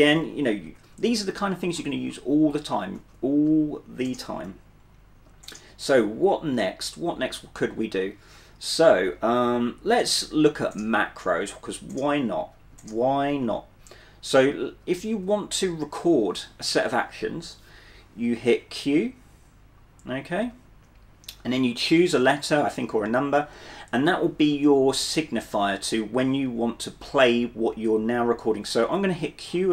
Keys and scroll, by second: 0.0-0.6 typing, 1.9-6.3 typing, 11.7-15.1 typing, 20.5 q.